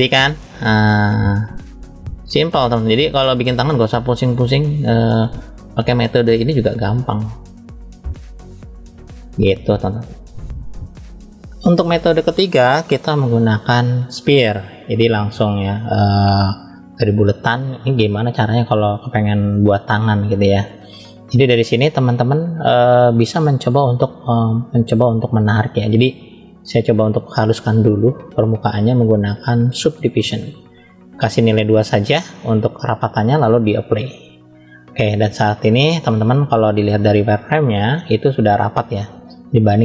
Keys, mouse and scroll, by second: 0.9 click, 2.0 click, 2.5-2.8 scroll up 2, 2.9 shift+middle click, 4.1 scroll down 1, 4.5-6.6 middle drag, 7.0 click, 8.1 middle click, 9.5 click, 10.3 middle click, 11.2 click, 12.5 click, 13.0 click, 22.0-23.1 middle drag, 26.1 drag, 26.5 click, 28.4-30.4 drag, 31.4 click, 32.7-33.7 drag, 35.3 click, 36.5-38.0 drag.